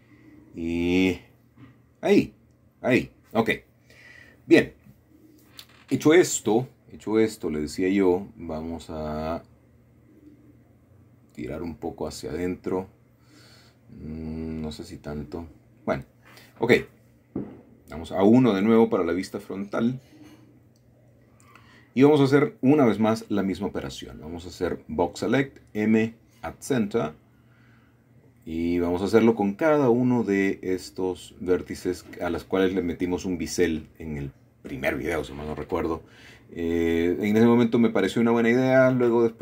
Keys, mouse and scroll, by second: 0.7-2.5 middle drag, 2.8 shift+middle click, 4.5 shift+middle click, 5.7 shift+middle click, 6.1-6.8 scroll up 1, 7.3 click, 8.3 g, 9.6 click, 10.0-10.9 scroll down 2, 11.4 shift+middle click, 11.9 shift+middle click, 12.3-14.0 scroll down 2, 12.6 middle click, 14.4 shift+middle click, 16.8 middle click, 17.7 KP_1, 18.6-19.3 scroll up 4, 20.0-21.7 middle drag, 21.7 typing, 23.1 b, 23.7-24.7 drag, 26.2 m, 27.1 click, 29.3-30.1 typing, 30.5 click, 32.6 m, 33.3 click, 34.9-35.3 typing, 36.0-37.1 drag, 37.7 typing, 38.3 click.